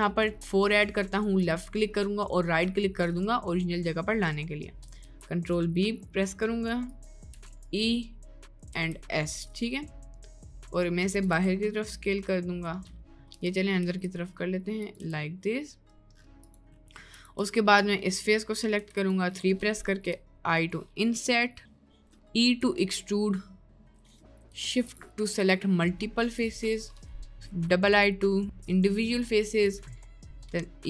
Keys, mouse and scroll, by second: 5.1 ctrl+b, 7.3 e, 8.7 s, 11.4 Tab, 11.8-13.0 middle drag, 13.2 Tab, 13.8 s, 15.0 Tab, 15.4 middle click, 16.8 middle click, 17.4 Tab, 17.8 click, 18.7 3, 19.0 click, 20.0 i, 22.2 click, 22.6 e, 24.0 click, 26.9 middle click, 30.1 middle click.